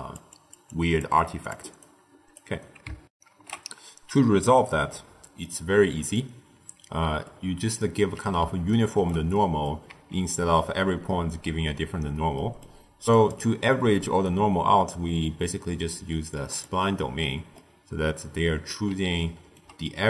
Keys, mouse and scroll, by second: 0.1-2.3 typing, 0.3 click, 0.6 click, 1.3 click, 1.8 right click, 3.0 ctrl+alt+shift+w, 4.8-6.1 middle drag, 6.1 click, 8.6-9.8 ctrl+middle drag, 9.8 z, 12.3-13.0 middle drag, 13.0-16.1 drag, 17.4-20.0 middle drag.